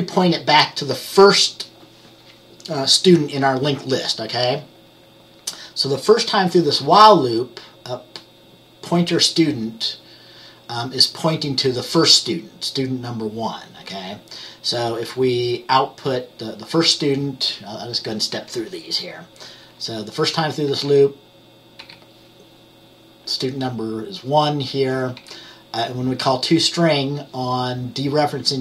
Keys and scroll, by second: 20.8 F10, 21.9 F10, 25.3 F10.